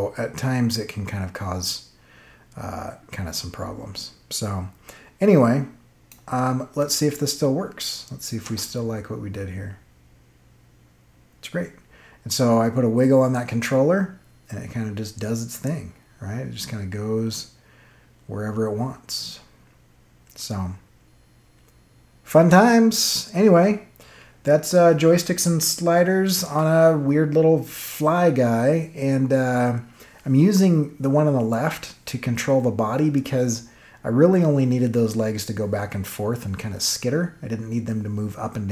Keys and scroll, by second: 8.4 space.